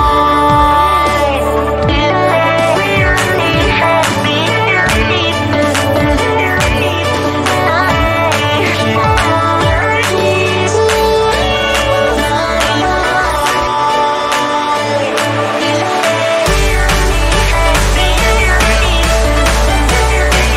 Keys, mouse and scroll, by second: 6.0 ctrl+alt+shift+e, 8.1 click, 11.9 click.